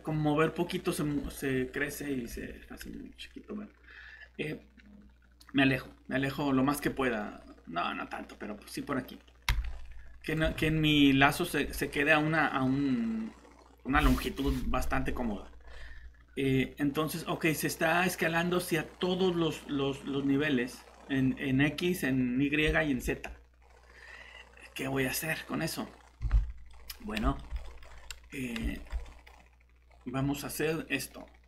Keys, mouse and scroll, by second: 2.2 Escape, 9.5 s, 10.4 Escape, 11.6 s, 26.2 Escape, 27.9 scroll up 1, 28.7 middle click, 29.8-31.4 scroll down 1.